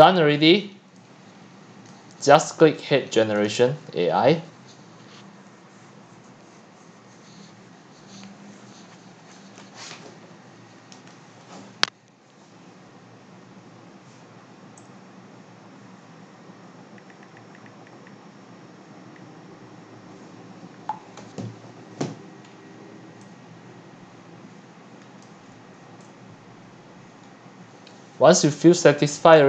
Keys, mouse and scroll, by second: 0.0-1.7 typing, 0.3-0.6 click, 3.5 click, 22.4 scroll up 3, 25.2 click, 25.4 middle click, 25.5 middle click, 29.2 click, 29.4 middle click.